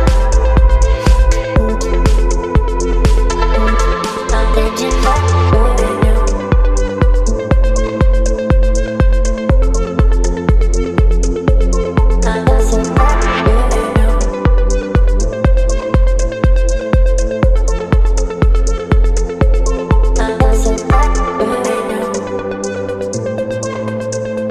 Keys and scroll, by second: 0.9 ctrl+v, 1.4 ctrl+a, 7.4 v, 8.5 ctrl+t, 10.4 Return, 11.3 space, 11.6 t, 15.9-22.8 typing, 16.0 Return.